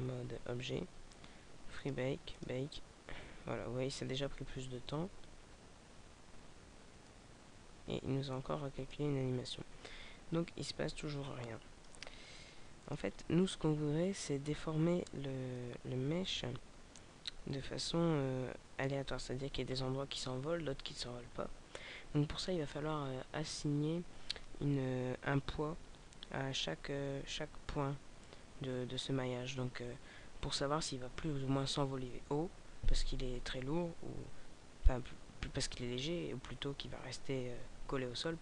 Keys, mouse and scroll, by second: 0.3-0.6 scroll down 3, 1.8 click, 2.3 click, 7.0 middle click, 11.3 click, 12.2 middle click, 14.8-15.4 scroll down 1, 15.4 middle click.